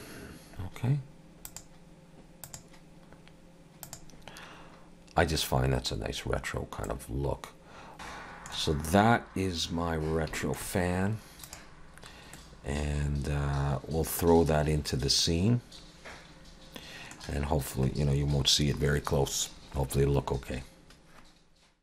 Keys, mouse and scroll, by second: 1.5 click, 6.9 middle click, 7.9 Tab, 7.9 alt+a, 7.9 alt+h, 7.9 middle click, 7.9 scroll down 2, 10.4 shift+middle click, 11.5 click, 12.4 middle click, 17.4-20.9 scroll down 4.